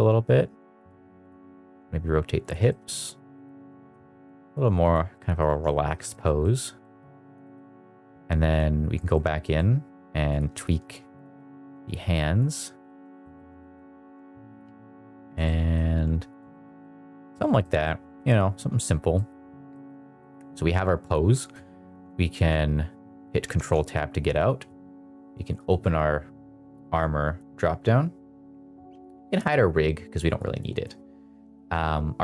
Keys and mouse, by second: 0.7 click, 1.5 r, 2.6 middle drag, 3.2 click, 3.5 g, 3.8 shift+z, 4.8 click, 5.0 middle drag, 5.5 middle drag, 6.0 shift+middle drag, 6.3 middle drag, 6.7 middle drag, 7.3 shift+middle drag, 8.4 click, 8.9 middle click, 9.3 middle drag, 10.2 click, 11.5 g, 12.4 click, 12.5 middle drag, 13.0 middle drag, 13.2 middle drag, 13.5 middle drag, 13.9 r, 14.5 click, 14.5 g, 15.3 middle drag, 15.8 r, 16.4 shift+middle drag, 16.7-17.1 middle drag, 17.5 middle drag, 18.0 middle drag, 19.0 middle click, 19.6 middle drag, 20.1 middle click, 23.5 ctrl+Tab, 25.5 click, 27.0 click, 29.2 click, 30.4-30.8 drag.